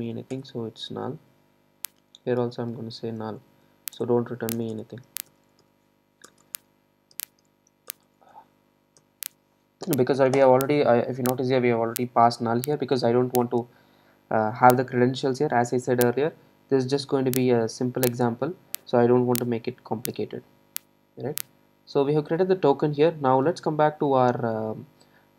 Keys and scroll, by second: 0.4 Return.